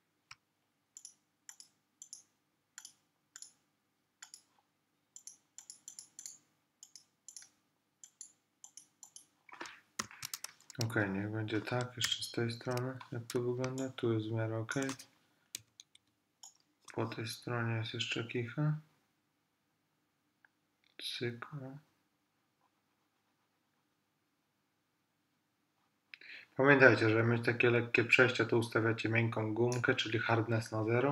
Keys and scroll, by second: 10.1 super+-, 12.1 super+=, 13.7 super+space, 15.6 ].